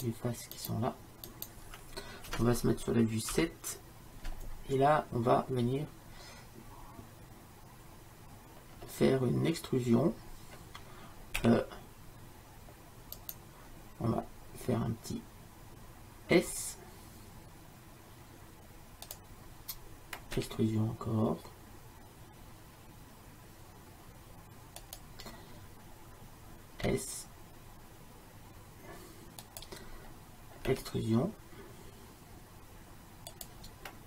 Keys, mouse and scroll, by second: 3.4 KP_7, 4.4 middle click, 8.9-11.5 middle drag, 11.5 e, 16.4 s, 20.4 e, 26.9 s, 30.8 e.